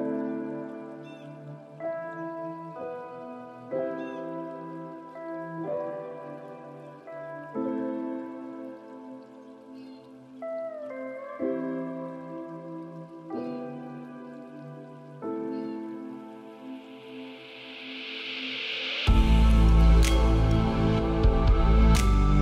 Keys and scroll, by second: 4.6 ctrl+space.